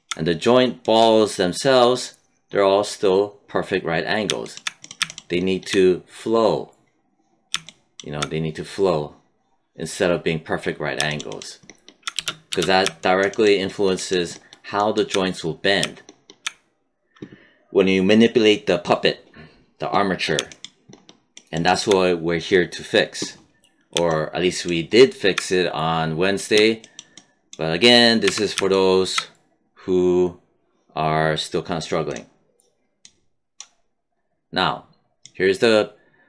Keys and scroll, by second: 12.1 space, 28.2 w.